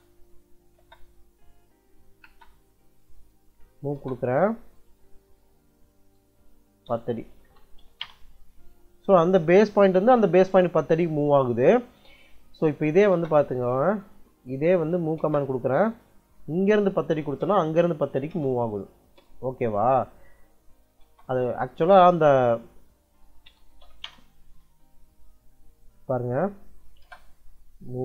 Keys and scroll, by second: 0.5 l, 0.6 space, 2.1 space, 3.7 m, 3.8 space, 6.0-8.1 typing, 12.8 u, 13.0 space, 14.8 m, 15.0 space, 16.8-18.1 typing, 18.2 Return, 20.5 c, 20.9 space, 22.8-24.2 typing, 25.3 Escape, 26.7 m, 26.9 space.